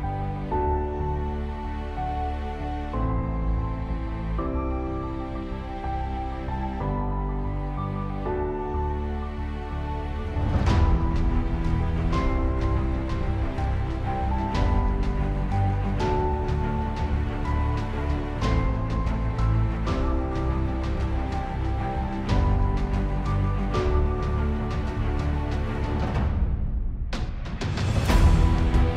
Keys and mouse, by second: 0.0 ctrl+z, 0.6 ctrl+z, 1.7 space, 3.8 space, 7.5 middle click, 10.3 Delete, 20.3 middle click, 22.9 Delete, 24.4 ctrl+d.